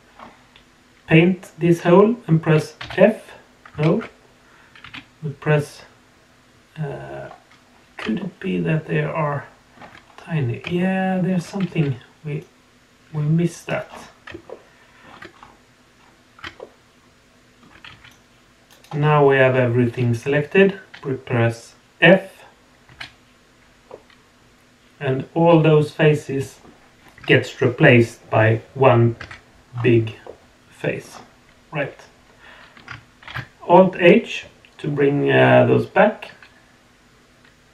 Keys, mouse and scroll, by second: 2.8 f, 3.9 ctrl+z, 4.8 x, 7.5-7.8 scroll up 3, 8.2-9.7 shift+middle drag, 10.0 scroll up 2, 10.8 shift+middle click, 11.6 c, 13.8 scroll down 2, 14.4 shift+middle click, 15.3 scroll up 1, 16.4 scroll up 3, 16.6-17.6 shift+middle drag, 17.8 c, 19.0-22.6 scroll down 3, 23.9-26.6 middle drag, 29.2 Tab, 29.7-30.2 scroll down 2, 30.2-31.0 middle drag, 31.1 scroll down 1, 31.8-32.7 middle drag, 33.2 alt+h.